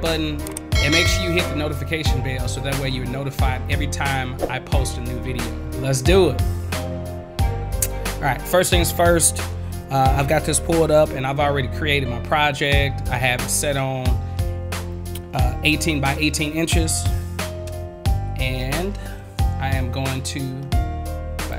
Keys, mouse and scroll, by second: 21.4 click.